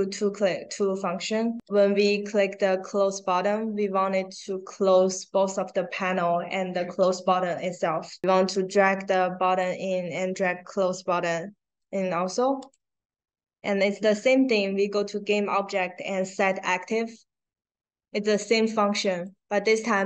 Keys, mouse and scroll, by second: 8.5-9.5 drag, 10.7-11.7 drag, 12.5 click, 19.0 click.